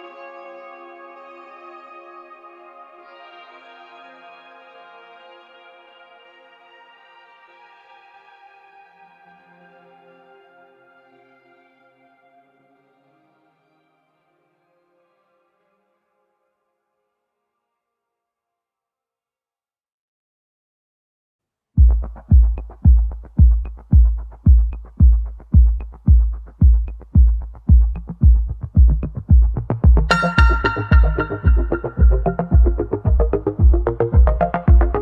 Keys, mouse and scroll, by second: 1.3 Tab, 1.7-3.0 scroll down 2, 5.8 g, 11.2-12.0 scroll down 5, 12.0-13.3 scroll up 4, 13.3-14.2 scroll down 2, 14.2-15.8 drag, 15.8 s, 18.5-21.0 drag, 21.1 3, 22.3 Tab, 22.9-23.7 middle drag, 23.7 Tab, 24.3 click, 24.7 middle click, 26.1-26.5 scroll down 2, 30.5-32.0 shift+middle drag, 32.0 click, 34.2 e.